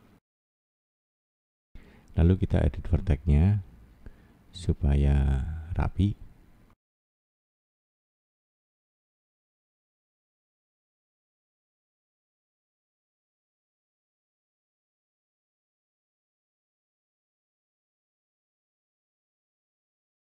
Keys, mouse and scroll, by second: 0.4 click, 1.2 click, 4.4 middle click, 9.3-10.5 scroll down 1, 10.5 click, 11.0 middle click, 11.9-12.3 scroll up 2, 12.3 middle click, 12.8 middle click, 15.2 click, 15.6 click, 15.8 click, 16.0 click, 16.5 middle click, 17.2 scroll up 1, 18.7 shift+middle click, 19.6 shift+scroll down 2, 20.2 middle click.